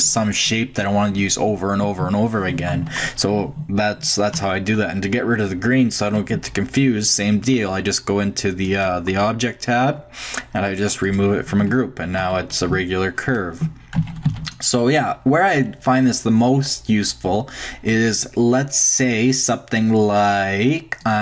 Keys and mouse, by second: 2.7-5.5 middle drag, 4.3 Tab, 8.5-10.5 drag, 9.7-11.0 middle drag, 11.0-12.2 drag, 11.6 Tab, 12.6 Tab, 12.7 a, 14.0 a, 14.3 x, 15.4-17.4 drag.